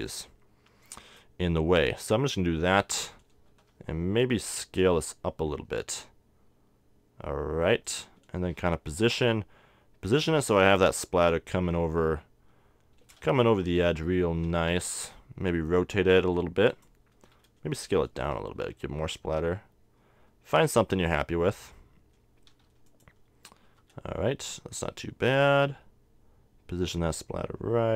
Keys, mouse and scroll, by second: 3.6 s, 8.6-10.4 drag, 8.6 g, 14.9 r, 17.3-18.9 drag, 18.2 s, 21.2-23.3 drag, 22.5 s, 23.8-25.6 drag, 23.8 g.